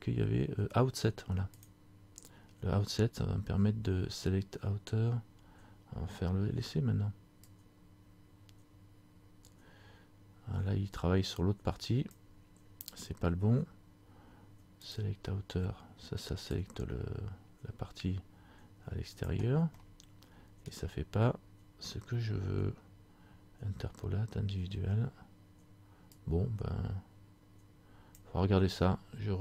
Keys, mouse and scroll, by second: 1.7 click, 7.5 click, 15.0 click, 19.9 middle click, 20.8 scroll down 1, 26.2 click.